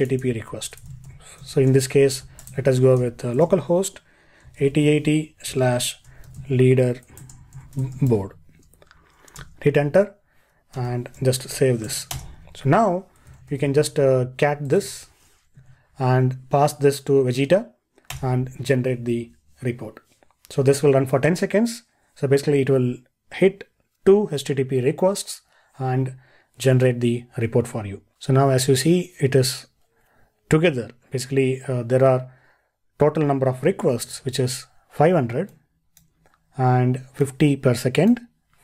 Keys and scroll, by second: 33.9 ctrl+e.